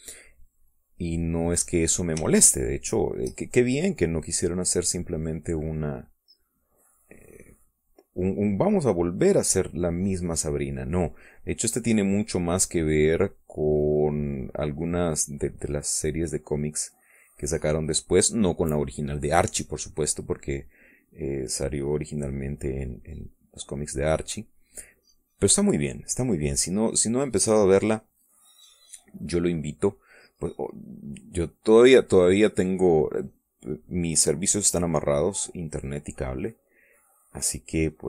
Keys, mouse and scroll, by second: 1.0-2.5 drag, 3.0-4.0 shift+drag, 4.3-7.7 shift+drag, 8.0-9.9 drag, 10.1-14.9 drag, 15.6-18.5 drag, 18.8 middle click, 20.2 middle click, 21.4-25.2 drag, 25.6-29.2 drag, 29.4 middle click, 30.2 middle click, 30.3 middle click, 30.9 middle click, 32.3-33.7 middle drag, 34.8-38.0 drag.